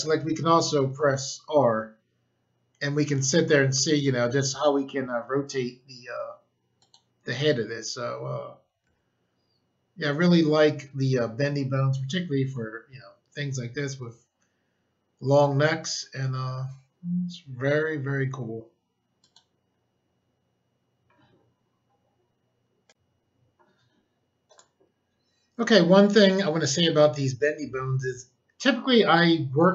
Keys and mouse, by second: 0.0 r, 6.7 right click, 8.8 g, 19.1 right click, 22.8 click, 23.5 click, 24.4 click.